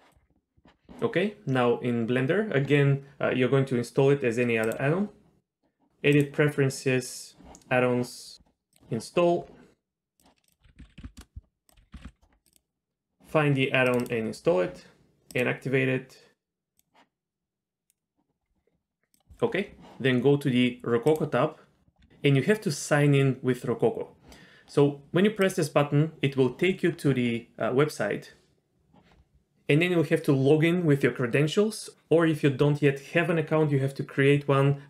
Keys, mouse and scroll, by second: 4.6-6.4 drag, 21.1 click, 25.4 click.